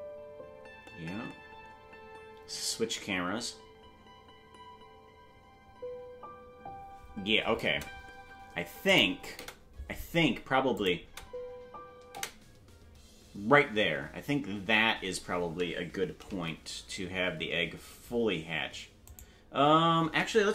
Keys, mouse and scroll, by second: 9.4 space, 10.7 click, 11.0 space, 12.1 space, 16.3 g.